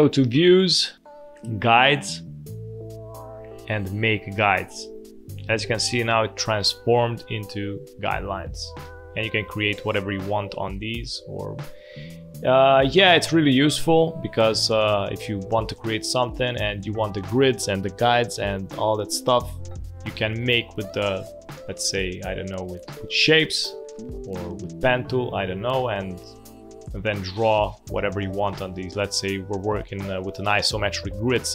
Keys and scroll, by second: 10.7 space, 12.0 space, 14.0 space, 26.5 space, 27.5 space.